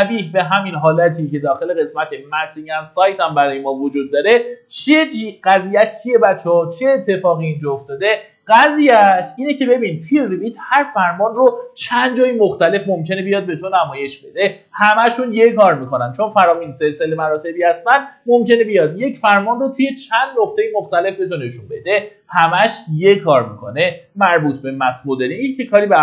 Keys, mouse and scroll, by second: 25.5 middle click.